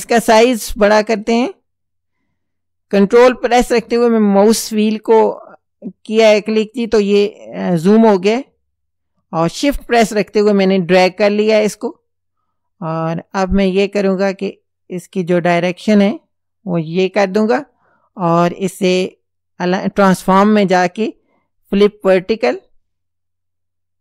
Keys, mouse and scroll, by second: 0.5-0.8 ctrl+scroll up 2, 1.5-1.9 ctrl+scroll up 2, 8.0-10.8 shift+drag, 14.1-17.6 drag, 18.2 right click, 21.8 click.